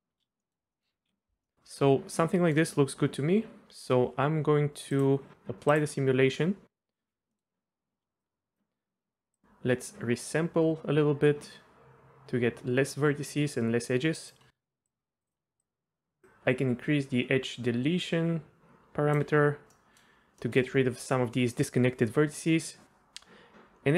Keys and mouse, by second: 0.1 space, 0.4 middle drag, 0.7 middle click, 1.4-2.5 middle drag, 5.7-6.2 drag, 7.3 middle click, 7.5 Tab, 8.3 click, 9.4-14.4 drag, 14.9 click, 15.6 click, 18.7 click, 19.7 middle drag, 20.4 middle click.